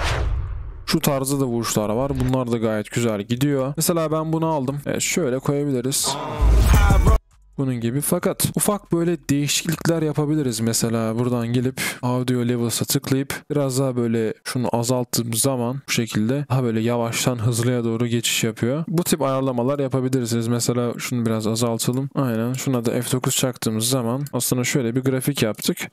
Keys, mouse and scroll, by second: 18.8 double click, 24.4 double click.